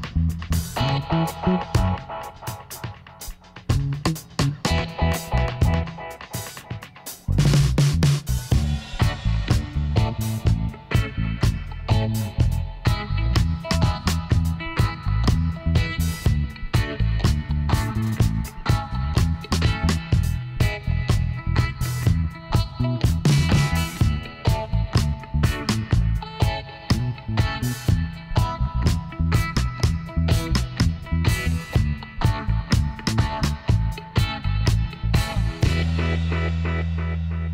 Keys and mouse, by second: 0.1 click, 0.2 middle click, 0.7 KP_1, 1.1 middle click, 2.7 r, 3.4 middle click, 5.2-6.8 middle drag, 6.8 r, 12.8 middle click, 13.3 a, 15.3 middle click, 15.5-16.6 right drag, 16.4 click, 17.2-18.2 drag, 18.3 middle click, 19.5 KP_1, 21.2 r, 24.0-25.6 drag, 25.3 a, 25.8-28.2 middle drag, 28.5 Tab, 31.1 Tab, 32.0-34.3 right drag, 34.5 ctrl+j, 36.5 Tab, 37.2 KP_1.